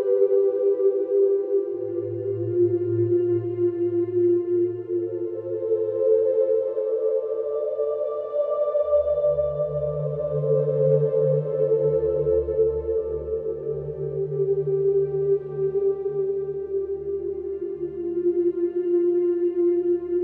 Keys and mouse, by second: 2.3 ctrl+z, 3.3 ctrl+z, 4.5-12.9 alt+drag, 12.9 ctrl+z, 14.3 f, 14.7-20.2 drag.